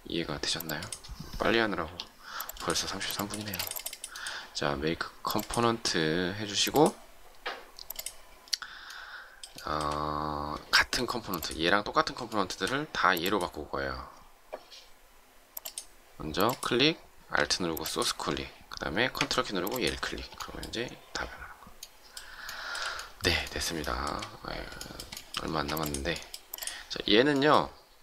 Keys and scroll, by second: 3.3 space, 25.4 shift+space.